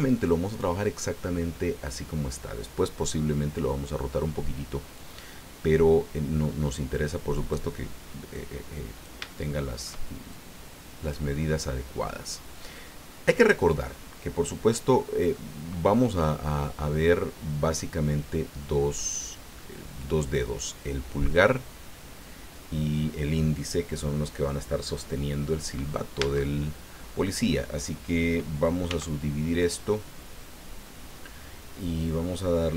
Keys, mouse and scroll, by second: 4.9-7.7 drag, 8.3 click, 9.3 shift+middle click, 10.3 shift+click, 12.8-14.0 middle drag, 15.3-17.9 middle drag, 26.2 Tab, 28.8 w, 29.6 click.